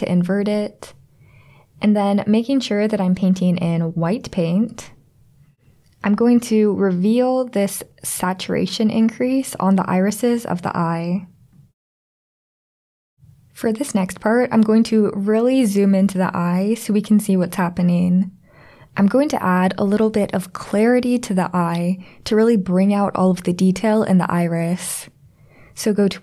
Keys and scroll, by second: 4.6 x, 6.2-7.2 ].